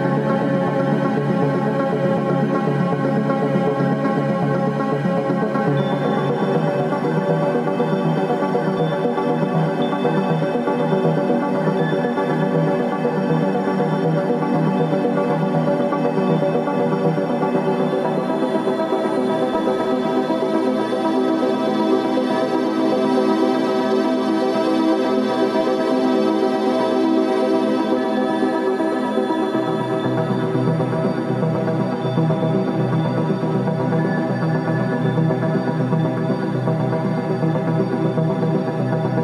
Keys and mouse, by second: 5.0-15.6 drag, 19.6-23.0 drag, 28.8 click, 30.3-39.2 drag.